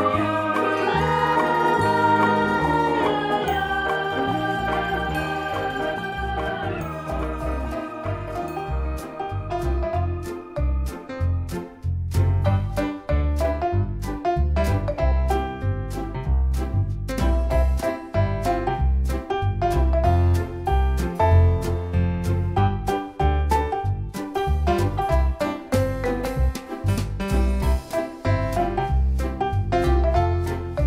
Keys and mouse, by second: 1.4-2.4 typing, 3.2 click, 4.1 right click, 5.8 click, 6.8 click, 7.8 click, 8.4 click, 9.2 click, 10.0 right click, 11.5 click, 14.9 click, 16.2 right click, 17.7 click, 19.2 click, 21.4 click, 22.8 click, 23.8 click, 25.4 click, 26.7 alt+BackSpace, 28.4 click, 29.1 alt+BackSpace, 30.3 click.